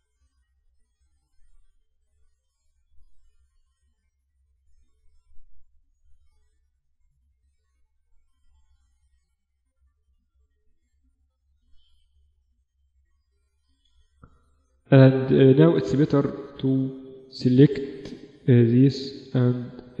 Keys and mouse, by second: 0.6 KP_1, 1.8 right click, 2.6 KP_7, 3.2 right click, 5.2 right click, 5.8 right click, 6.1 right click, 6.2 click, 6.7 KP_1, 7.2-9.2 middle drag, 8.0 r, 9.6 g, 10.5 s, 11.2-12.8 middle drag, 11.6 z, 12.2 z, 13.7 z, 15.3-18.0 typing.